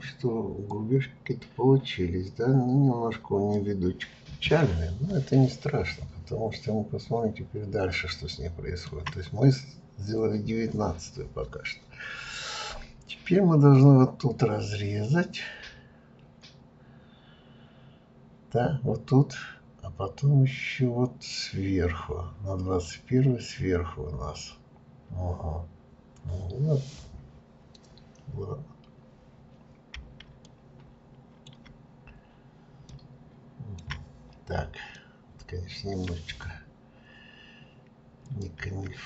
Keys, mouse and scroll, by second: 4.6-5.3 scroll down 2, 5.3-8.4 shift+middle drag, 9.0-11.9 shift+scroll up 1, 29.3-30.1 scroll down 1, 30.4-32.0 shift+middle drag, 32.0-32.5 scroll up 2, 32.9 middle click, 33.8-34.9 scroll down 1, 35.0-36.7 shift+middle drag, 36.7-38.2 scroll up 1, 38.2 click.